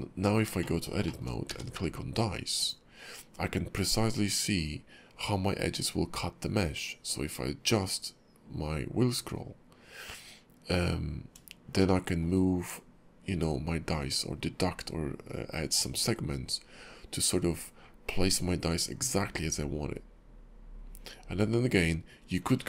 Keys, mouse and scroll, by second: 0.2 scroll up 2, 0.6 shift+middle click, 1.0 shift+middle click, 1.5 q, 11.8 shift+middle click.